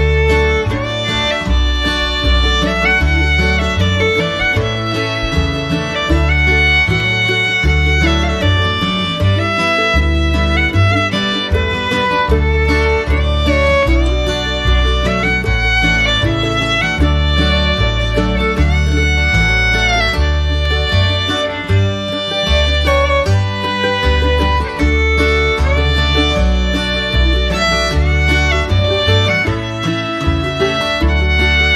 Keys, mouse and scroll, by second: 3.4 ctrl+i, 4.1 ctrl+i, 10.4 ctrl+click, 13.1 ctrl+z, 14.6 alt+click, 22.2 ctrl+z, 25.2 shift+click.